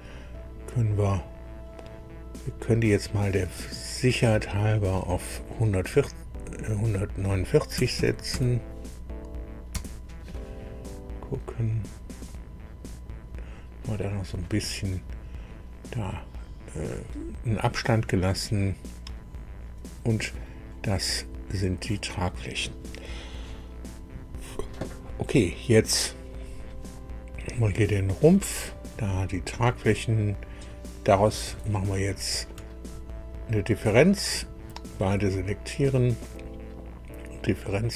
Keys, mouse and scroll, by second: 4.5 click, 5.8 click, 7.7 KP_1, 7.9 KP_4, 8.3 KP_9, 9.7 KP_Enter, 11.1-11.9 scroll up 4, 12.3-14.1 drag, 14.3-14.7 scroll down 2, 18.0-20.6 drag, 27.5 click, 32.0 ctrl+click, 37.7 click.